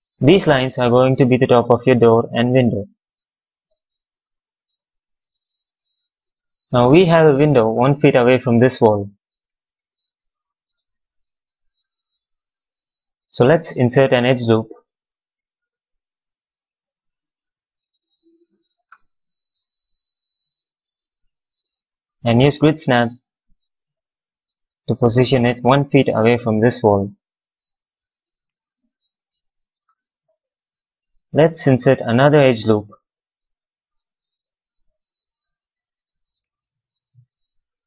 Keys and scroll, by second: 0.0 q, 9.3 space, 18.5 w, 18.8 space, 25.1 x, 28.2 space, 29.8 q, 35.7 w, 36.2 space.